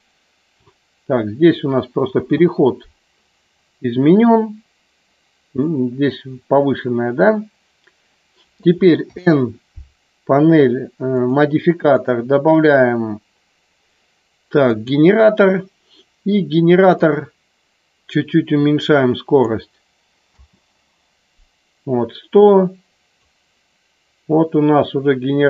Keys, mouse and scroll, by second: 2.2 space, 11.1 click, 12.0-15.0 drag, 17.1-19.3 drag, 20.4 space, 22.4 click.